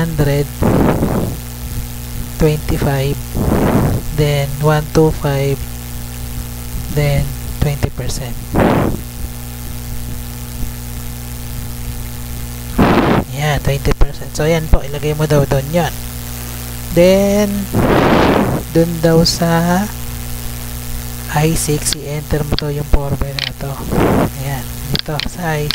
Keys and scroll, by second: 0.2 Tab, 0.5 1, 0.9 0, 1.2 Right, 1.8 Tab, 2.3-3.3 typing, 3.4 Right, 3.8 Tab, 5.1-9.6 typing, 6.9 Tab, 10.9 Left, 11.3 Right, 11.6 F2, 11.8 Left, 12.4 Right, 12.6 BackSpace, 12.9 Return, 13.3 Up, 16.0 Tab, 23.6 ctrl+c, 24.1 Tab.